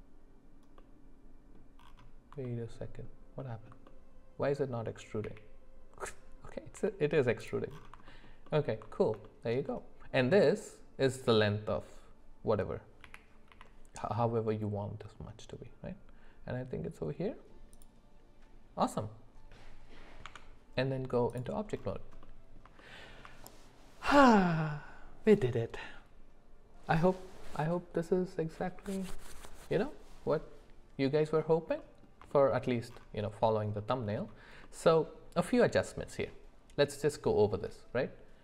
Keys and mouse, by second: 0.8 middle click, 2.4 alt+middle click, 3.9 middle click, 5.3 e, 8.1 middle click, 8.4 alt+middle click, 9.2 shift+middle click, 13.0 g, 20.2 Tab, 22.2 middle click, 22.8 shift+middle click, 31.8 middle click, 32.3 shift+middle click.